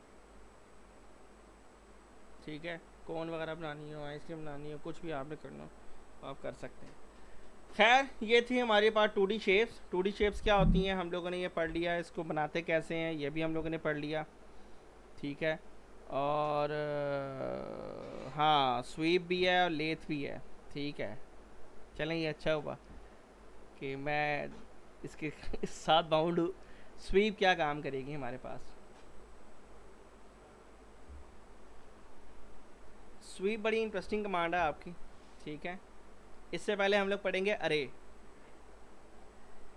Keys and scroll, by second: 32.8 z.